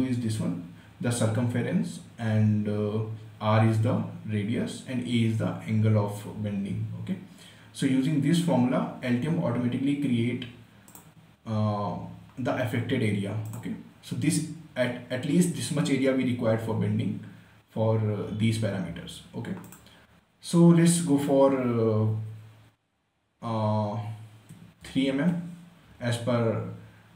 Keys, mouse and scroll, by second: 11.2 click, 13.8 click, 20.0 click, 24.6-25.8 typing.